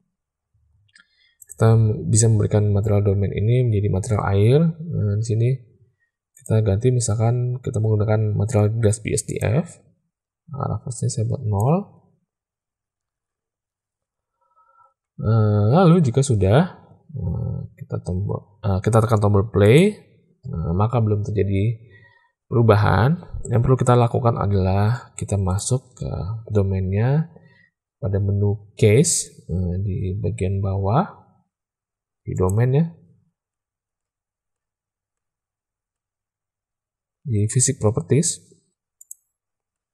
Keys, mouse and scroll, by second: 1.3 click, 6.3-9.4 drag, 10.9-11.6 drag, 19.5 click, 24.6 space, 25.4 click, 32.3 click, 38.9 click.